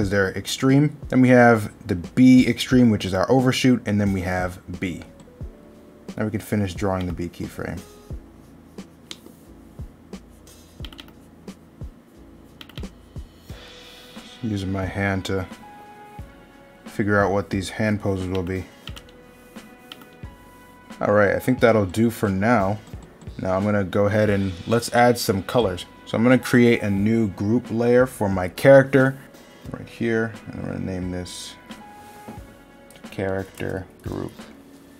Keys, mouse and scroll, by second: 1.0 middle click, 7.8 middle click, 16.8 middle click, 24.7 middle click, 26.0 middle click.